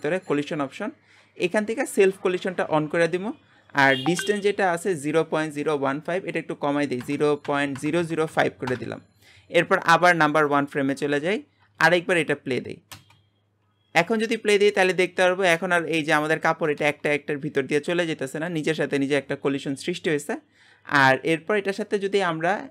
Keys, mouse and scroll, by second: 1.9-8.0 drag, 8.0 KP_0, 10.4 click, 11.3-11.8 scroll down 5, 11.8-12.9 shift+middle drag, 12.2-12.9 scroll up 2, 12.9 space, 16.8 space, 17.1-20.0 middle drag, 20.0-21.0 scroll up 1, 21.7-22.7 drag.